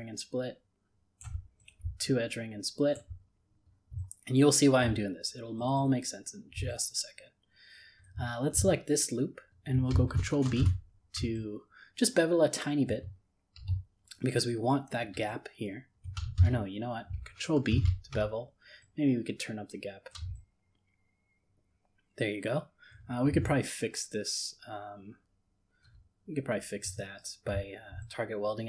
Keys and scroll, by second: 10.4 ctrl+b, 16.4 ctrl+z, 17.7 ctrl+b.